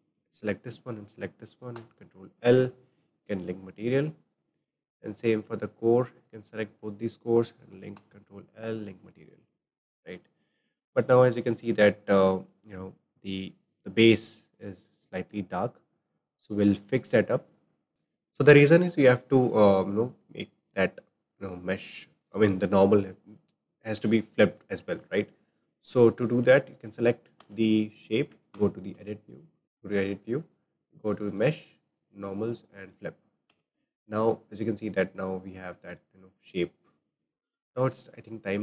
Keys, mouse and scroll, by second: 0.6 shift+click, 1.7 ctrl+l, 3.1 ctrl+l, 4.2 click, 5.1 click, 6.7 ctrl+click, 7.9 ctrl+l, 9.0 ctrl+l, 9.6 click, 15.2 click, 15.5 click, 16.3 click, 16.9 click, 17.9 click, 19.1 click, 20.1 click, 25.8 click, 26.8 click, 27.4 Tab, 28.6 a, 29.6-33.5 drag, 33.5 Tab, 34.0 click, 36.3 click, 37.3 scroll up 3, 37.3 scroll down 3, 37.6 shift+middle click, 37.9-38.6 scroll down 1.